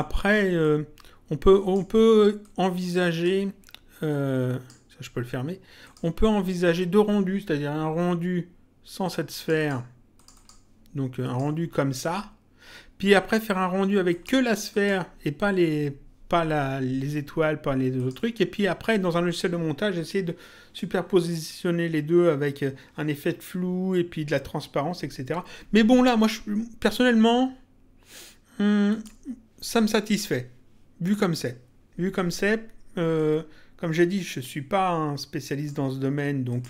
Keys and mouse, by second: 2.4 click, 4.1 click, 5.8 click, 9.3 click, 14.0 click, 17.9 click, 26.9 click, 28.8 click, 33.1 click, 36.5 click.